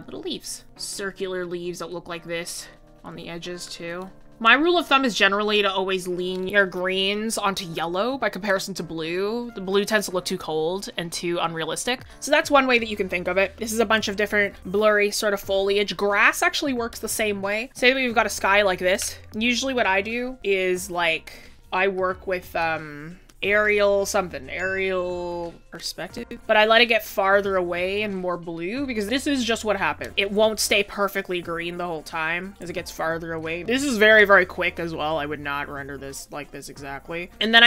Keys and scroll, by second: 0.0 ctrl+z, 12.0 scroll, 20.6 ctrl+z.